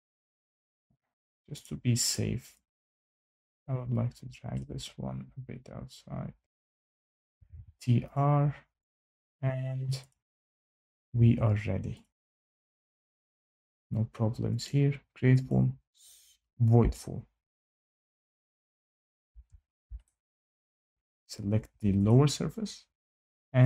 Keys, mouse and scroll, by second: 0.0 Escape, 0.3 Escape, 1.6 click, 2.0 click, 4.5-4.9 scroll, 6.4 click, 6.6 Escape, 7.0 scroll, 7.0-7.9 typing, 8.1 click, 8.8 click, 9.2 scroll, 10.0 click, 10.7 click, 11.0 Escape, 11.2 Escape, 12.0 click, 14.6 click, 15.4 click, 17.5 shift+right click, 19.5 scroll down 3, 20.2 scroll up 2, 20.5 scroll, 20.6 scroll down 1, 20.7 shift+right click, 22.0 click.